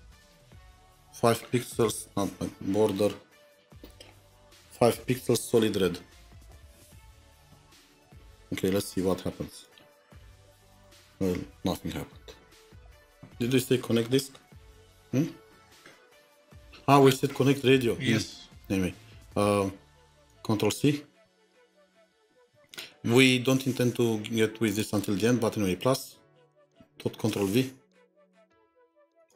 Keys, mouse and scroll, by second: 0.0-8.6 typing, 4.1 Tab, 20.2 typing, 21.9 ctrl+c, 22.0 typing, 26.6-29.3 typing.